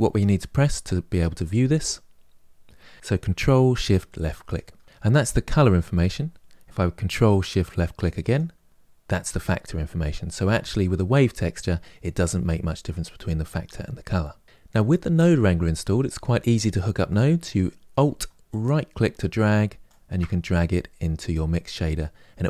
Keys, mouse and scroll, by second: 4.4 ctrl+shift+click, 8.2 ctrl+shift+click.